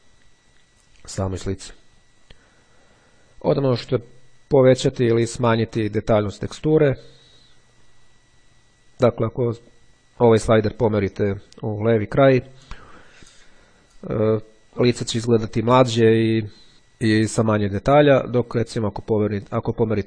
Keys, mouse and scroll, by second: 1.1-2.3 drag, 4.1-5.3 drag, 6.2-7.6 drag, 8.9-9.9 drag, 18.4-20.0 drag.